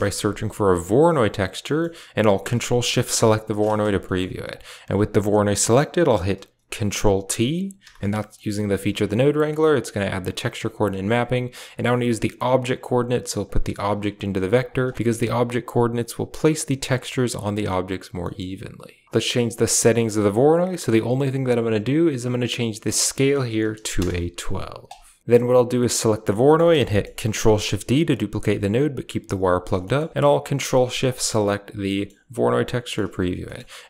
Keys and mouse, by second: 1.4 typing, 1.5 middle click, 2.9-5.2 typing, 3.0 ctrl+shift+click, 3.9 middle click, 4.4 click, 7.7 ctrl+t, 8.2 middle click, 8.7 a, 9.7 click, 10.3 click, 10.5 click, 12.4-13.1 drag, 13.3 click, 13.6-14.6 typing, 14.2 click, 14.8 middle click, 18.1 middle click, 19.0 BackSpace, 22.8 click, 25.4 click, 25.9 typing, 26.2 middle click, 26.7 middle click, 27.2 ctrl+shift+d, 29.7 middle click, 30.8 ctrl+shift+click, 31.0 middle click, 31.2 typing, 31.7 middle click, 32.7 middle click, 33.3 middle click.